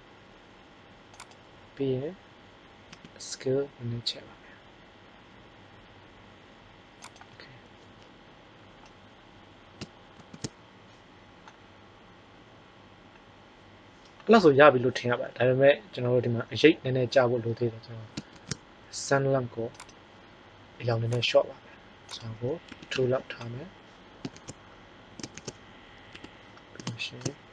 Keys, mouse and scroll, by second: 2.8 s, 10.1 shift+z, 18.4 shift+z, 24.2 shift+z, 25.3 shift+z, 26.0 KP_1.